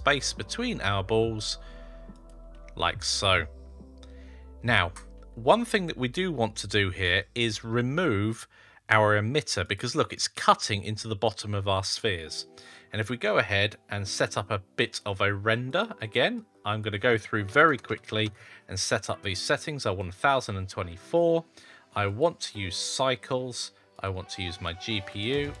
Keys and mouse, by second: 0.2-1.0 middle drag, 1.4 s, 2.4-4.5 middle drag, 5.8-6.2 middle drag, 7.3-7.7 shift+middle drag, 9.5 click, 14.8 click, 15.6 click, 16.2-18.8 drag, 21.9-22.8 drag, 23.8-24.5 drag.